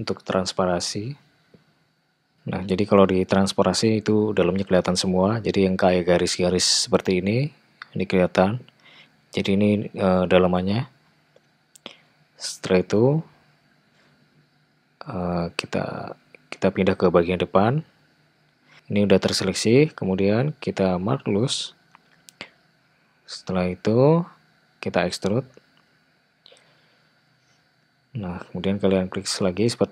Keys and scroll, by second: 16.5 `, 24.5 e, 29.2 e.